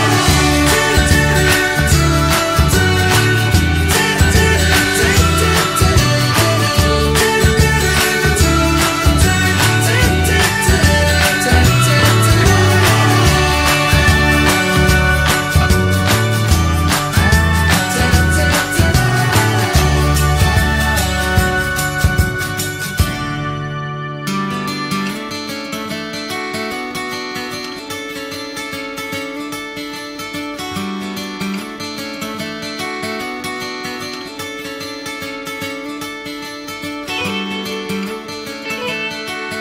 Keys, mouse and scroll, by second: 0.0 click, 0.2 shift+middle click, 1.1 click, 1.4-2.6 middle drag, 2.6 scroll up 1, 2.7-9.1 middle drag, 9.1 scroll up 1, 9.2 middle click, 10.1 click, 10.3-11.3 middle drag, 11.3-14.0 drag, 14.6 click, 15.9-17.5 drag, 17.7 middle click, 17.8 scroll down 1, 17.9 middle click, 18.6 click, 18.9 shift+click, 19.5 shift+d, 20.1 click, 20.9-22.1 middle drag, 22.1-22.6 shift+scroll down 1, 22.6 r, 24.4 click, 24.8-26.4 middle drag, 26.4 r, 28.6 click, 29.5 ctrl+z, 30.1 click, 30.7-32.8 middle drag, 32.8 click, 33.1 click, 34.5-38.0 drag.